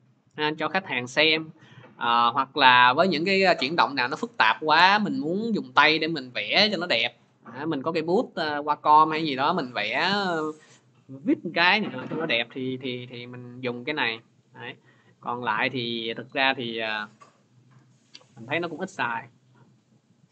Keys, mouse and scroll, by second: 7.6 click, 11.4-12.7 drag, 16.0-20.3 drag.